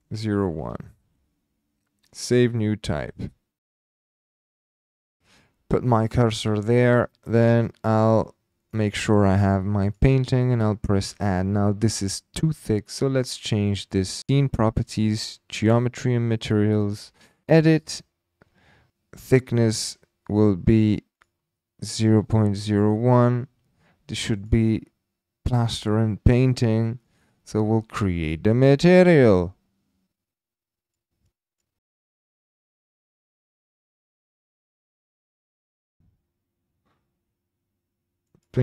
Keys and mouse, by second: 4.2 click, 4.5 h, 4.8 h, 4.9 h, 5.1 h, 5.3 shift+click, 8.1-8.8 drag, 9.9 click, 10.0 typing, 14.2 click, 14.3 click, 14.9 click, 17.5 click, 20.3 click, 21.1-22.7 drag, 24.4 click, 30.8 click, 31.2-31.6 drag, 31.9 click, 32.5 click, 32.9 click, 33.1 click, 33.7 click, 35.8-38.4 drag.